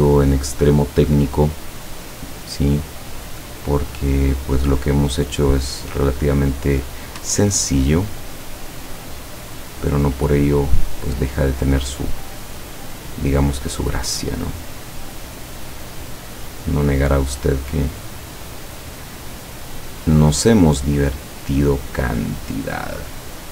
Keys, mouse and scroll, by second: 1.3 click, 3.9 click, 5.9 click, 7.5-8.2 ctrl+scroll down 2, 9.6-10.0 ctrl+scroll up 2, 11.6 click, 12.6 click, 13.9-16.5 drag, 16.9-18.7 drag, 19.7 click, 20.3-21.9 drag.